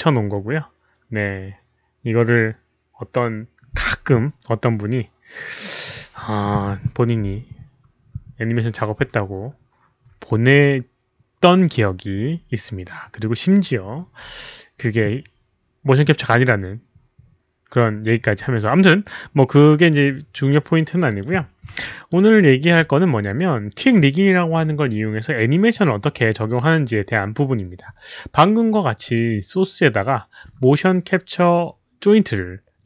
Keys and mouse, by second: 19.8 click, 21.0 click, 21.8 alt+click, 22.4 alt+middle drag, 25.7 alt+click, 25.7 alt+middle click, 29.0 alt+click, 29.0 alt+middle click, 29.1 alt+middle click, 30.6 alt+click, 30.6 alt+middle click.